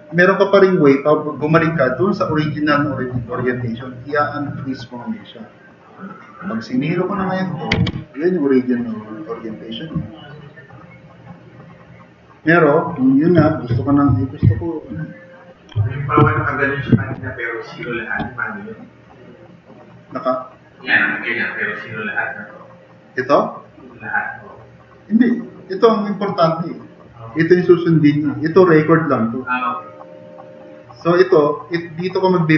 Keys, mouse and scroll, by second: 7.8 0, 7.9 Return, 13.7 ctrl+y, 14.0 ctrl+y, 14.4 ctrl+y, 14.8 ctrl+y, 16.3 ctrl+shift+z, 17.2 ctrl+z, 19.0 click.